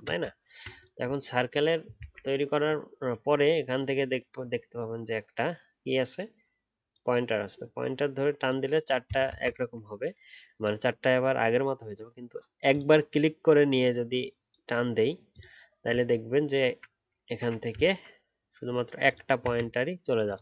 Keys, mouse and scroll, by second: 0.4-3.0 alt+scroll up 2, 9.2 ctrl+z, 16.0-16.4 alt+scroll down 1, 16.5-17.8 alt+scroll up 1, 17.8 alt+scroll up 2.